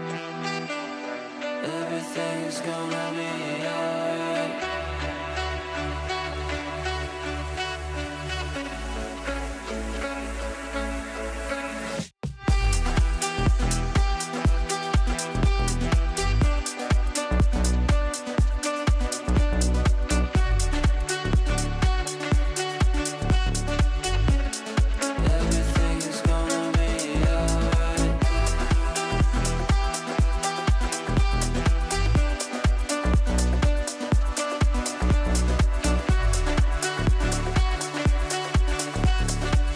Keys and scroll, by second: 10.8 Delete, 20.7 Up, 28.0 shift+F2, 28.5 Escape.